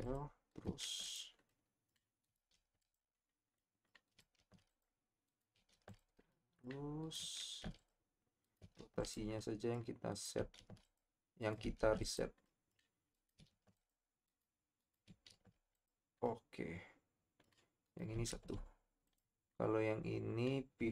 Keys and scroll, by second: 0.8 ctrl+a, 2.5 ctrl+a, 4.4 ctrl+a, 5.7 ctrl+a, 7.4 ctrl+a, 8.8 ctrl+a, 10.6 ctrl+a, 11.8 ctrl+a, 13.5 ctrl+a, 15.3 ctrl+a, 18.3 ctrl+a.